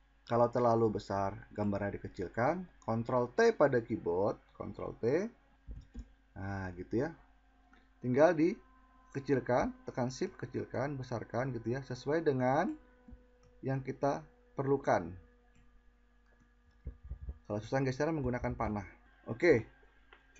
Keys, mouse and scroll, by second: 4.2 ctrl+t.